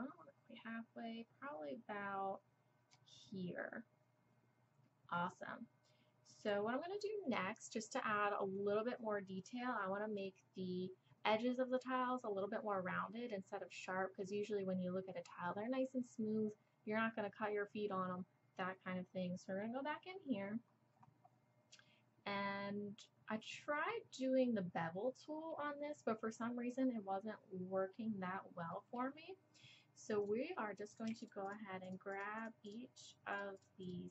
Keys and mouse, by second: 21.8 click, 21.9 middle click, 21.9-23.2 drag, 23.2 middle click, 23.4 click, 23.8 middle click, 27.9-30.2 middle drag, 30.2 click, 31.9-34.1 drag.